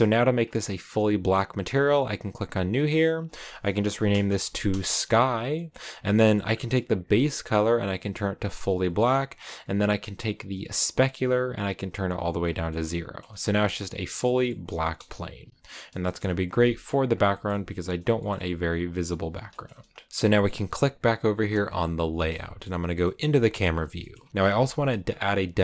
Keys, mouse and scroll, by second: 2.3-5.6 drag, 6.7-7.0 scroll down 1, 8.2 click, 10.3-10.8 scroll up 1, 10.8-11.5 scroll up 1, 11.5 scroll up 1, 11.5 click, 12.3-12.6 scroll down 1, 12.6 middle click, 13.3 scroll down 1, 13.5 a, 13.6-15.3 middle drag, 15.3 Right, 16.7 KP_0, 16.7-17.9 scroll up 7, 17.2 shift+middle click, 17.9 scroll up 1, 18.1 shift+middle click, 18.7 scroll up 1, 18.9-19.3 scroll down 1, 19.4 shift+middle click, 20.1-21.4 scroll up 1, 21.4 click, 22.0 shift+middle click, 22.8 KP_0, 23.9 shift+middle click, 24.1-25.6 scroll up 4.